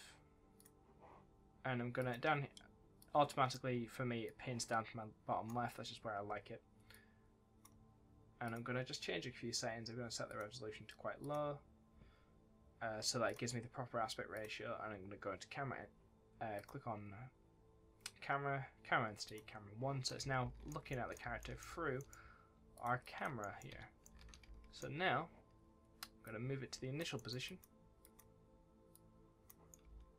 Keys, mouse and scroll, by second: 8.4 click, 16.5 click, 19.2 click, 20.0 right click, 20.1 s, 20.8 a, 20.8 right click, 21.6 w, 21.9 right click, 22.7 click, 22.9 double click, 23.3 right click, 23.4-24.6 typing, 23.9 right click, 26.2 click, 27.1 right click, 27.4 click, 29.5-30.1 typing, 29.6 right click.